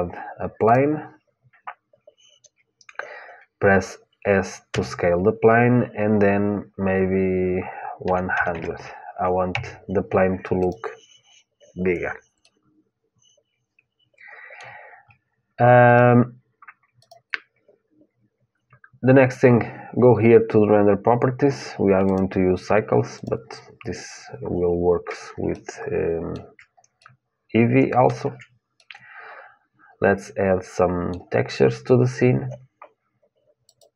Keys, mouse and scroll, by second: 4.4 s, 10.4-12.4 drag, 12.4-14.3 middle drag, 15.6-19.0 drag, 21.8-23.8 drag, 25.3-30.8 middle drag.